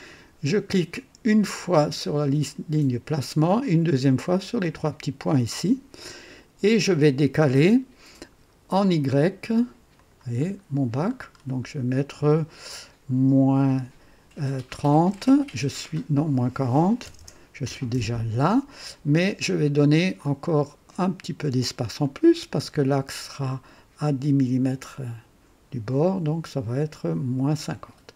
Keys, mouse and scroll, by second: 3.0 click, 4.5 click, 9.9 click, 10.4-11.5 scroll down 5, 13.6 -, 13.8 KP_Subtract, 14.6 KP_3, 15.0 KP_0, 16.9 BackSpace, 17.1 BackSpace, 17.6 KP_4, 17.8 KP_0, 20.1-22.4 drag.